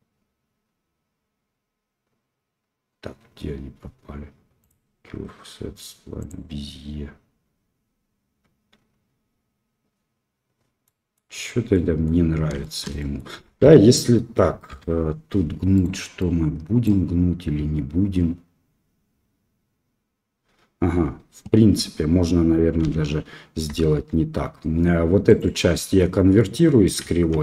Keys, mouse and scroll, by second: 4.7-9.9 drag, 10.8 middle click, 11.7 middle click, 12.6 shift+middle click, 12.9 middle click, 13.4 KP_1, 15.7 right click, 16.1 right click, 22.8 l, 23.8 Tab, 25.2 click.